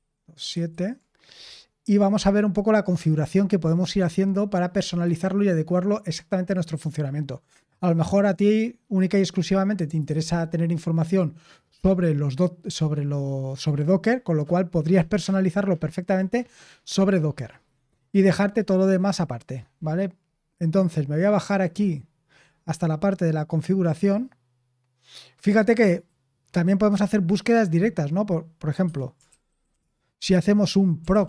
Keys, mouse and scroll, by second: 0.5 super+7, 20.9-21.4 scroll down 1, 21.4-22.4 scroll down 1, 22.4-23.6 scroll down 1, 23.6-24.4 scroll down 1, 24.4-25.2 scroll down 1, 25.2-26.0 scroll down 1, 26.0-27.5 scroll down 1, 27.5-28.8 scroll down 1, 28.8 Escape, 29.0-31.2 typing.